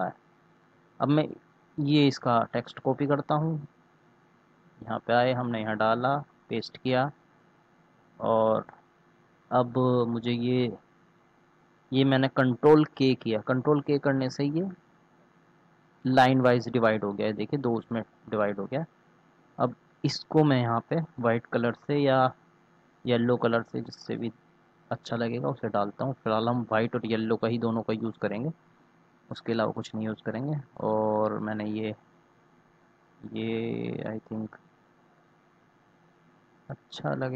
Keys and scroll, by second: 1.1 ctrl+c, 5.8 ctrl+v, 12.9 ctrl+k.